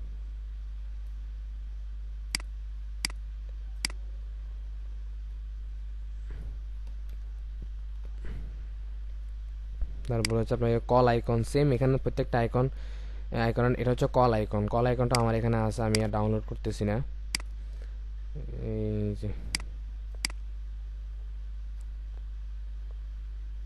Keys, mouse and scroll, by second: 7.1 Return, 11.3-11.8 scroll down 1, 14.1-14.5 scroll up 1, 22.2 Right, 22.8 Up.